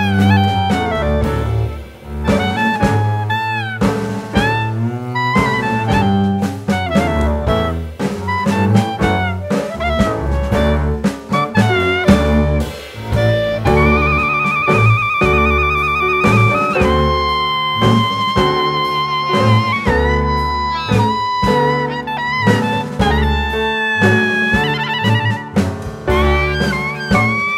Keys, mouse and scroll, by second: 0.3 middle click, 2.3 scroll down 1, 2.6 scroll up 1, 2.8 scroll down 1, 3.6 click, 4.1 shift+middle click, 4.4 click, 5.0-5.4 scroll up 1, 6.1 click, 7.8 click, 8.9 alt+z, 10.1 click, 13.3 click, 14.1 shift+middle click, 15.5 shift+a, 18.1 s, 20.9 click, 21.7 s, 22.7 click, 24.5-24.8 scroll up 1, 24.8 s.